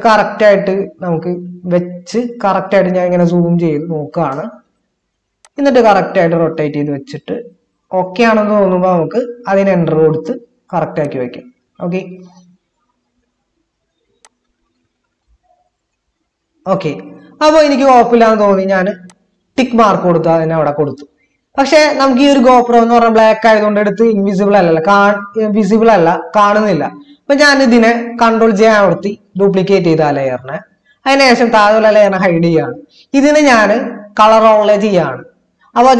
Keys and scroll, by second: 3.2 ctrl++, 28.9 ctrl+j.